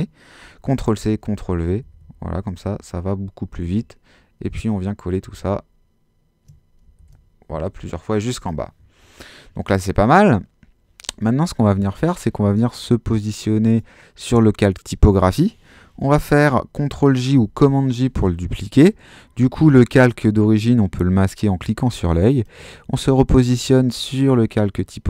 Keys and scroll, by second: 0.7 super+c, 1.1 super+v, 7.0 super+v, 17.3 super+j.